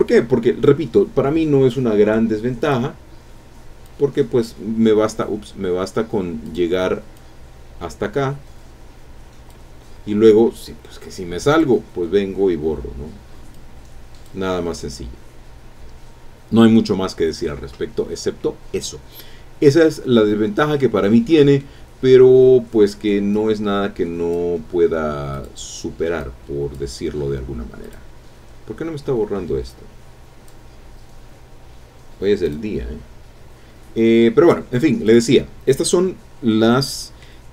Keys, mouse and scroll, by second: 2.6 click, 3.1-3.4 scroll up 1, 3.8 click, 5.5 scroll up 1, 6.4 click, 7.1-9.7 drag, 11.5 click, 13.5 click, 19.9 scroll down 1, 20.7 scroll down 1, 20.7-21.8 drag, 22.0-22.5 scroll up 1, 23.3 click, 25.3 click, 26.2 click, 27.8 click, 29.7 click, 32.4 click, 35.0 click, 35.6-36.5 scroll down 1, 36.5 click.